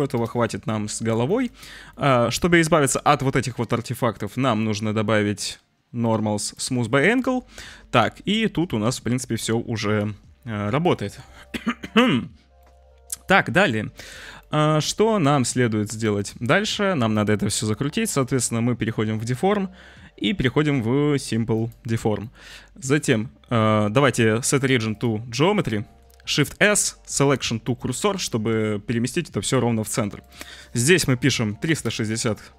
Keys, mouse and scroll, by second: 1.3 shift+click, 1.4-1.9 middle drag, 1.9 click, 2.0 shift+middle click, 2.3 shift+middle drag, 2.3 shift+click, 2.4-2.9 middle drag, 2.9 click, 3.0-4.1 middle drag, 4.1-6.6 drag, 6.8-7.2 middle drag, 7.2-11.0 drag, 12.6-13.3 drag, 14.4 click, 16.1-21.7 drag, 22.2 click, 24.0-25.0 drag, 25.4-26.0 drag, 26.3 shift+s, 30.1-31.9 drag.